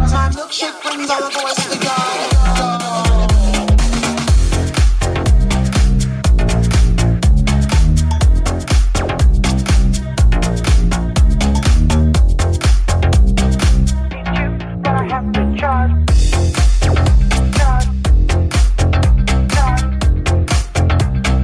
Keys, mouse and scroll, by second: 2.0 alt+click, 2.0-5.4 alt+shift+middle drag, 3.5 r, 3.5 g, 5.4 alt+click, 5.5-12.9 alt+middle drag, 6.3 r, 6.3 g, 8.6 right click, 9.2 g, 10.7 right click, 11.2 shift+g, 12.0 right click, 12.3 g, 12.9 right click, 13.0 middle click, 13.8-15.7 middle drag, 15.7 right click, 15.7-17.5 middle drag, 17.5 right click, 17.5-19.1 middle drag, 18.3 g, 19.1 right click, 19.2-21.0 shift+middle drag, 19.4 g, 21.1-21.4 shift+middle drag.